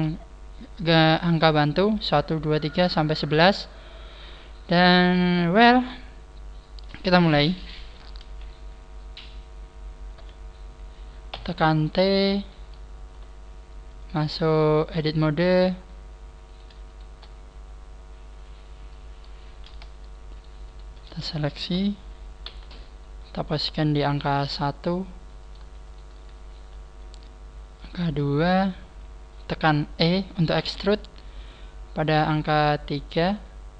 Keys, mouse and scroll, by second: 11.3 t, 13.0-13.4 scroll up 3, 13.9 click, 16.4 right click, 16.8 shift+right click, 17.6 scroll up 5, 20.3 shift+right click, 22.4 g, 24.4 click, 25.4 right click, 25.9 shift+right click, 26.6 g, 28.2 shift+middle click, 30.6 e.